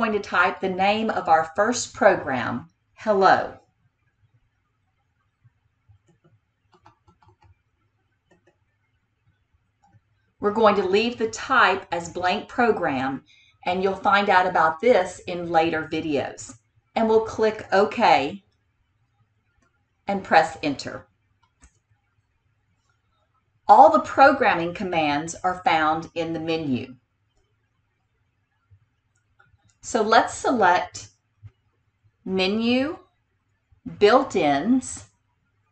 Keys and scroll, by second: 6.1 h, 6.8 e, 7.2 l, 8.5 o, 18.4 Tab, 21.6 Return, 32.8 Menu.